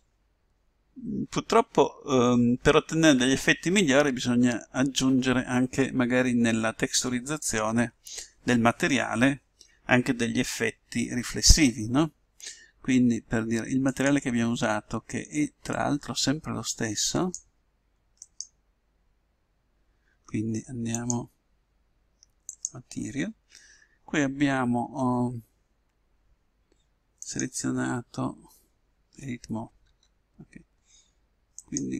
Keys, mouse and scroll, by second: 14.2-17.6 drag, 18.4-20.0 right drag, 21.1-22.8 drag, 27.2-29.0 right drag, 29.8 Tab, 31.6-31.9 right drag.